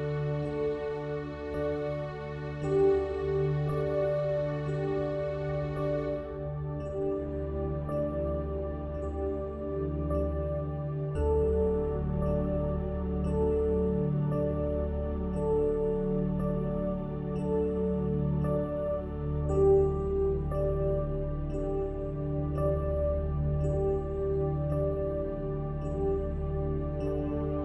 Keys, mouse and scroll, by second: 1.5-3.7 middle drag, 4.1 Tab, 5.7-7.6 middle drag, 7.6-10.1 drag, 12.0 alt+c, 13.7 Tab, 15.7 a, 17.4-20.8 drag, 21.7-25.4 drag, 24.5 f, 26.1 ctrl+z.